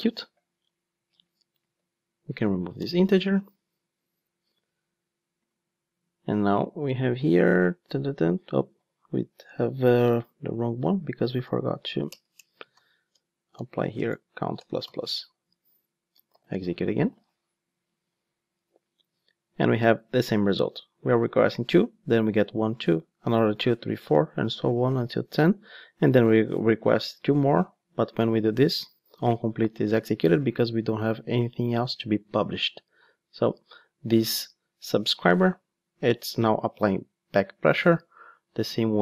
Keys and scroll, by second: 13.2 Return, 16.3 ctrl+shift+d.